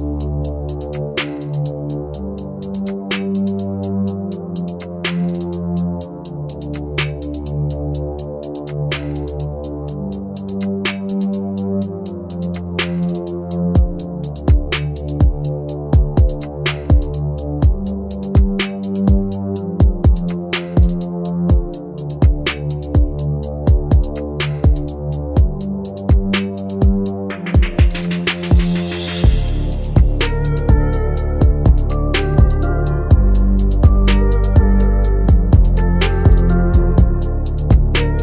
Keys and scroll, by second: 20.6 Delete, 23.0 Delete, 26.6 ctrl+g, 31.9 ctrl+z, 36.8 shift+Page_Up.